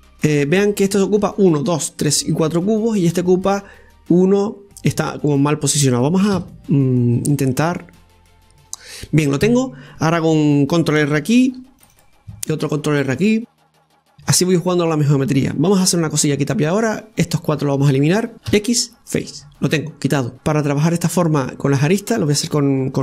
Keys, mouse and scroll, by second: 8.6 scroll down 2, 8.9-11.8 right drag, 12.4 ctrl+r, 17.3 click, 18.3 shift+right click, 19.4 x, 20.3-23.0 shift+middle drag.